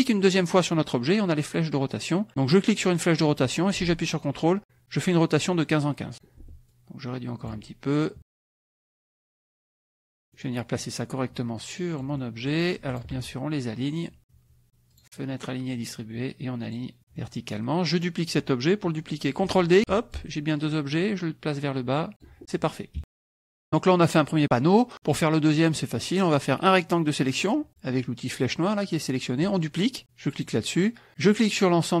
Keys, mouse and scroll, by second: 2.3-6.4 drag, 6.7 ctrl+click, 8.0 ctrl+click, 9.1 ctrl+click, 9.8 KP_Subtract, 10.3 scroll up 1, 10.4 middle click, 11.2-12.6 drag, 12.2-12.6 scroll up 1, 12.9 shift+click, 14.9 click, 16.6 click, 17.0 click, 17.2 middle click, 17.2 click, 18.0 click, 19.8 ctrl+d, 20.1-22.4 ctrl+drag, 23.0 KP_Subtract, 23.2 middle click, 23.2-23.6 scroll down 1, 23.6 KP_Subtract, 24.2 middle click, 24.2 scroll down 1, 24.2 click, 25.7 click, 26.6-27.6 drag, 30.3 click, 31.1-32.0 drag.